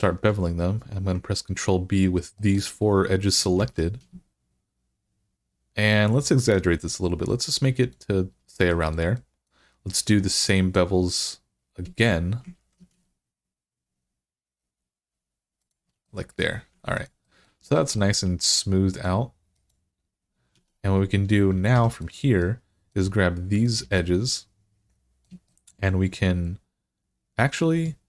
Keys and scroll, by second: 3.4 ctrl+b, 12.4 ctrl+b, 16.5 Tab, 17.6 alt+z, 20.4 Tab, 21.6 3.